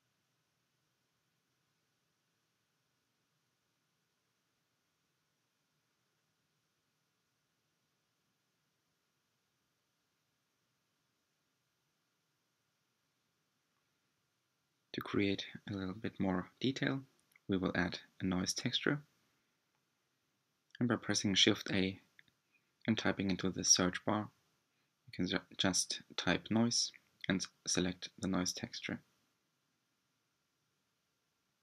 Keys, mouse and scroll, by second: 5.5 click, 7.0-8.9 drag, 20.0 ctrl+shift+click, 24.7-27.5 drag, 28.9-30.6 drag.